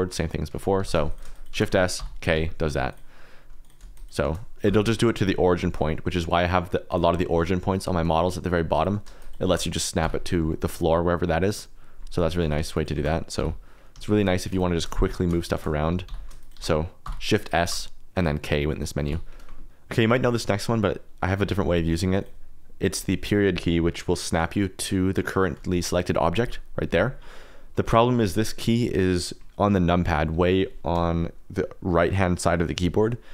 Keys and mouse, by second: 0.7 g, 0.9 shift+z, 1.3 shift+click, 1.5 shift+s, 2.3 g, 3.6 click, 3.9 shift+click, 4.2 shift+s, 5.6 shift+middle click, 6.3 click, 6.8 click, 8.7 click, 9.1 shift+click, 9.4 shift+s, 12.3 shift+middle click, 12.7 shift+click, 12.9 shift+s, 13.4 j, 14.5 shift+click, 14.7 shift+s, 15.4 shift+click, 15.5 shift+s, 16.4 shift+click, 16.5 shift+s, 17.4 shift+click, 17.6 shift+s, 21.0 click, 21.1 middle click, 22.1 click, 22.9 click, 26.4 KP_Decimal.